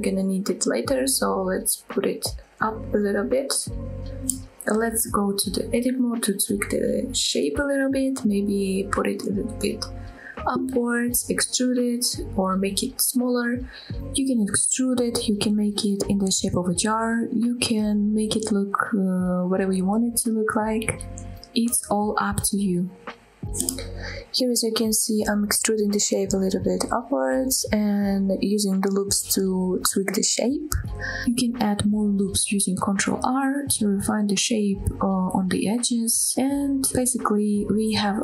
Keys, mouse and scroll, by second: 0.9 g, 1.3 z, 3.6 click, 4.5-4.9 shift+middle drag, 5.8 Tab, 9.3 click, 9.8 g, 9.9 z, 10.7 click, 11.3 e, 11.7 s, 12.7 click, 12.9 f, 13.3-13.9 scroll down 2, 13.4 middle click, 13.9 KP_1, 14.2 click, 14.3 scroll up 1, 14.5 s, 15.6 click, 15.6 right click, 16.6 ctrl+r, 16.8 right click, 17.0 click, 17.2 click, 17.5 click, 17.7 click, 18.1 g, 18.2 g, 19.2 click, 19.4 click, 19.5 Tab, 19.6 scroll down 2, 19.7 middle click, 19.9 click, 20.1 click, 20.4 click, 20.5 middle drag, 20.9 middle drag, 21.2 click, 21.3 Tab, 21.5 middle click, 21.7 Tab, 22.4 click, 22.6 middle click, 22.9 KP_1, 23.0-23.7 scroll up 3, 23.1 click, 23.7 Tab, 24.0 click, 24.7 click, 25.1 shift+middle click, 25.5 e, 26.6 click, 26.8 s, 27.3 click, 27.6 s, 28.5 click, 28.7 click, 29.0 g, 29.3 right click, 29.3 g, 29.4 g, 29.6 z, 30.8 click, 31.0 scroll down 1, 31.1 middle click, 31.3 click, 31.6 click, 31.8 middle click, 32.0 Tab, 32.1 middle click, 32.3 middle click, 32.5 click, 32.6 click, 32.7 Tab, 32.8 middle click, 33.2 click, 33.6 click, 33.7 middle click, 34.0 KP_1, 34.4 shift+click, 34.7 scroll up 4, 34.9 shift+middle click, 35.0 s, 36.5 click, 36.8 ctrl+r, 37.9 scroll down 1, 38.0 click, 38.1 Tab.